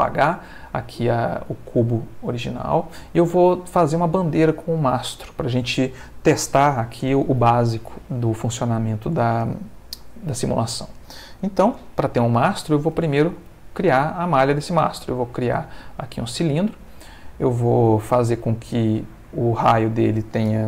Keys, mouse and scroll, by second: 0.1 shift+middle click, 1.5-3.0 middle drag, 10.3 shift+middle click, 11.1 shift+middle click, 12.7 shift+a, 16.3 click, 17.8 click, 19.8 click.